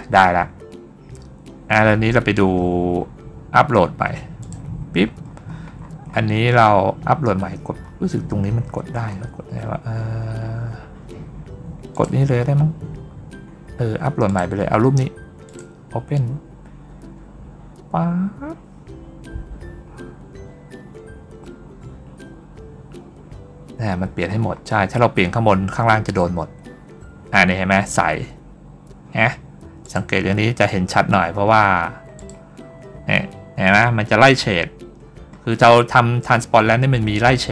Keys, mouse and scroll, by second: 4.3 click, 5.1-6.3 middle drag, 6.6 middle click, 7.7 middle click, 11.3 middle click, 11.8 click, 14.1 click, 15.3 click, 21.9 middle click, 21.9-22.3 scroll down 1, 23.5 scroll up 1, 23.8-24.3 scroll down 1, 24.3 scroll up 1, 25.6 scroll down 1, 29.7 click, 31.1 scroll down 1, 31.6 scroll up 1, 32.0 click, 32.5 scroll down 1, 35.2 scroll up 1.